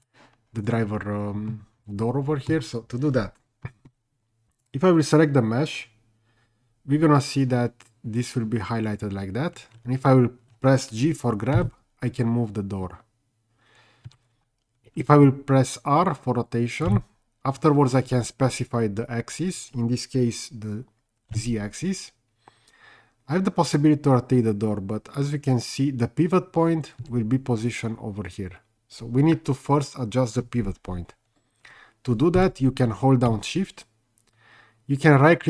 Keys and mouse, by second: 1.5-2.5 middle drag, 4.6 click, 11.5 g, 14.1 Escape, 16.9 r, 21.3 z, 27.1 Escape.